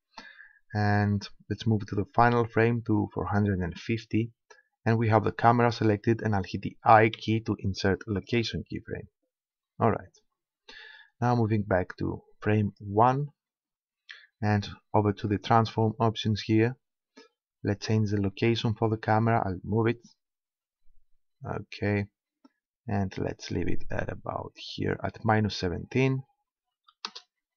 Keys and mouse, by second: 2.2-3.8 drag, 4.2-5.6 middle drag, 7.2 i, 12.7-14.4 drag, 15.2-16.8 drag, 17.2-18.8 drag, 24.6-26.4 drag.